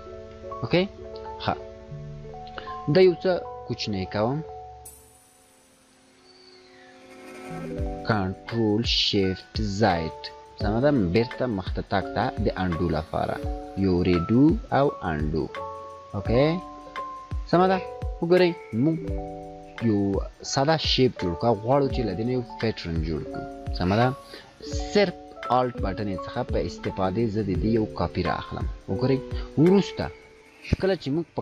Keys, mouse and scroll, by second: 1.3 scroll down 1, 1.9 scroll up 1, 5.8 ctrl+z, 10.3-11.3 drag, 24.6-27.8 drag, 28.3-28.7 scroll down 2, 28.7 scroll up 1.